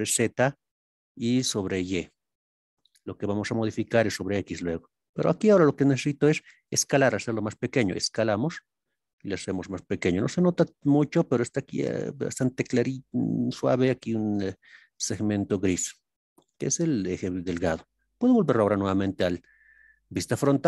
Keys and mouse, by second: 11.0 click, 18.5 KP_1.